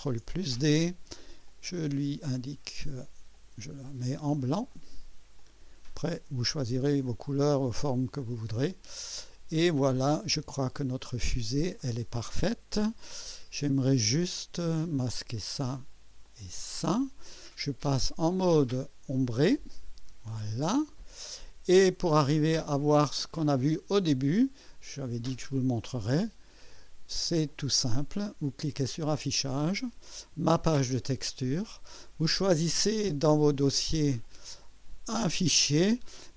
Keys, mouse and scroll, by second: 0.1 ctrl+d, 1.5 click, 3.3 click, 4.7 click, 5.4 click, 6.7 click, 7.5 click, 8.2-9.4 drag, 14.2 click, 15.2 click, 15.5 space, 16.3 click, 16.6 space, 18.5 click, 19.7 click, 20.3 click, 21.4 right click, 22.5 scroll up 1, 23.1 scroll down 2, 23.6 right click, 24.6 click, 25.7 scroll up 2, 26.3 scroll down 2, 26.8-27.4 right drag, 29.3 click, 30.9 click, 34.2 click.